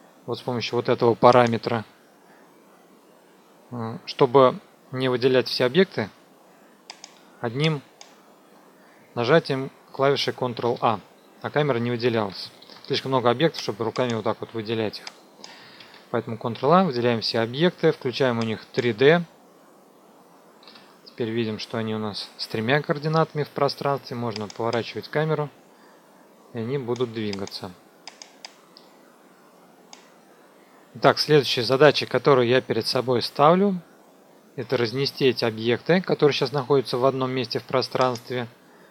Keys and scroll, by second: 10.7 ctrl+a, 12.5 ctrl+shift+a, 15.7 ctrl+a, 20.6 p, 30.4 F2.